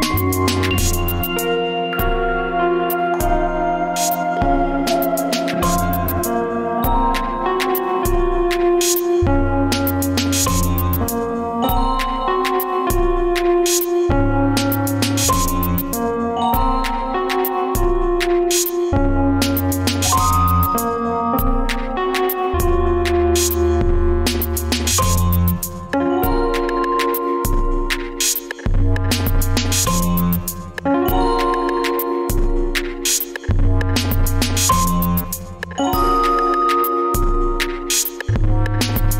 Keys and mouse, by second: 7.0 i, 7.0 e, 9.4 ctrl+z, 9.8 ctrl+z, 12.2 e.